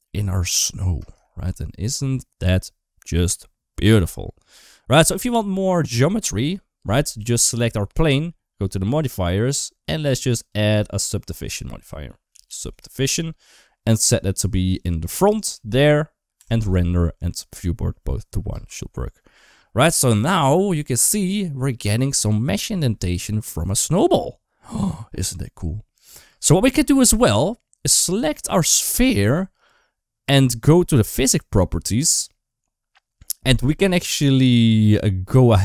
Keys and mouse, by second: 1.1 shift+middle click, 2.3-3.5 middle drag, 4.9 click, 4.9 space, 5.3 shift+middle click, 8.6 click, 10.1-12.5 drag, 13.7 click, 15.3-16.5 drag, 18.3 space, 26.1 space, 27.7 click, 28.1 shift+middle click.